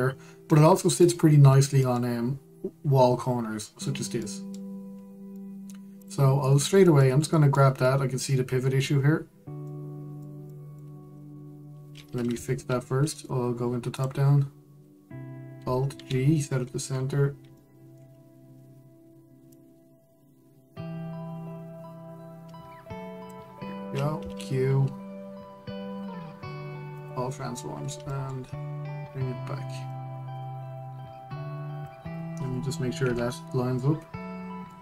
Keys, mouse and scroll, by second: 0.1-0.9 scroll up 2, 0.9-1.2 scroll down 2, 1.2-1.9 middle drag, 1.9-2.5 scroll down 2, 2.5 scroll down 1, 2.5-5.4 middle drag, 5.4-6.0 scroll up 2, 6.0-6.7 middle drag, 6.7 click, 7.2-7.5 scroll down 2, 7.5-9.7 shift+middle drag, 9.7-10.3 scroll up 2, 10.3-12.7 middle drag, 12.7-13.1 scroll down 2, 13.1-14.6 shift+middle drag, 14.6 click, 15.8-16.6 scroll up 1, 16.6 alt+g, 17.2 scroll up 1, 18.3-20.2 shift+middle drag, 20.2 click, 24.8 q, 26.5 q, 28.4-28.8 scroll down 1, 28.8-30.6 shift+middle drag, 30.6 click, 33.7 KP_Decimal, 34.5-34.8 middle drag.